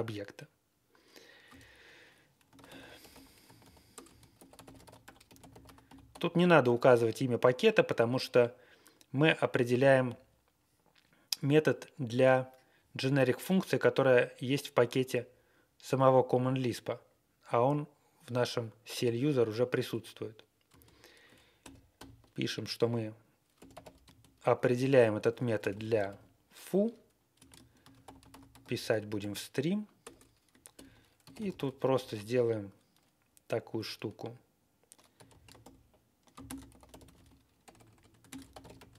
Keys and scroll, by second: 2.2-6.3 typing, 20.6 space, 21.6 shift+9, 21.9 shift+9, 23.3-29.1 typing, 29.9 Return, 30.7-32.7 typing, 35.1-35.5 typing, 36.4 super+space, 36.6-38.9 typing.